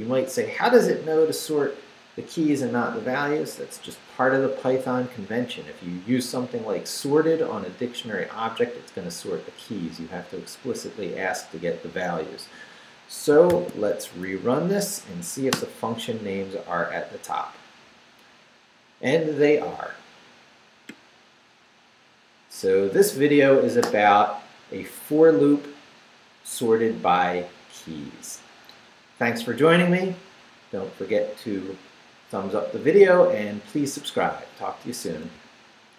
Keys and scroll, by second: 13.5 shift+;, 14.0 shift+Up, 15.5 Return.